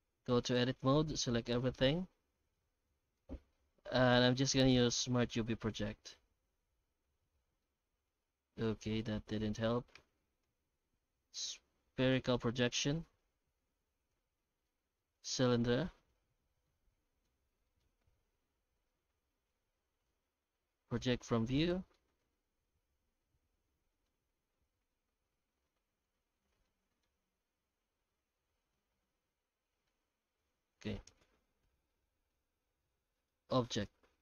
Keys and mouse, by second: 0.7 Tab, 1.2 a, 1.8 middle click, 3.1 u, 6.9 Tab, 7.6-9.3 middle drag, 10.0 Tab, 10.4 u, 13.2 Tab, 13.5 Tab, 14.1 u, 16.0 Tab, 16.4 Tab, 16.6 alt+middle click, 17.7 shift+middle click, 18.0 u, 21.6 Tab, 21.9-24.0 middle drag, 24.4 Tab, 25.3 u, 26.7 middle click, 27.2 Tab, 28.1-29.9 middle drag, 30.0 Tab, 30.6 Tab, 32.3 middle click, 33.3 click.